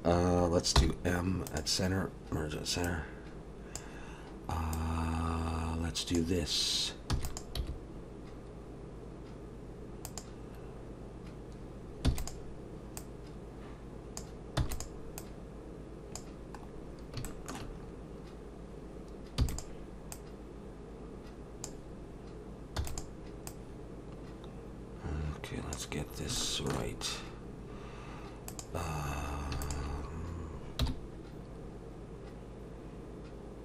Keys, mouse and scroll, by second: 0.8 m, 2.8 click, 4.7 click, 7.1 e, 7.6 g, 13.0 click, 14.6 e, 15.2 click, 16.7-17.2 scroll up 1, 17.3 shift+middle click, 17.8-18.3 scroll up 2, 19.4 e, 20.1 click, 22.8 e, 23.5 click, 26.1 scroll up 2, 26.4 shift+middle click, 27.1-27.7 scroll up 1, 27.7-28.5 scroll up 1, 28.5 click, 29.6 shift+click, 30.8 m.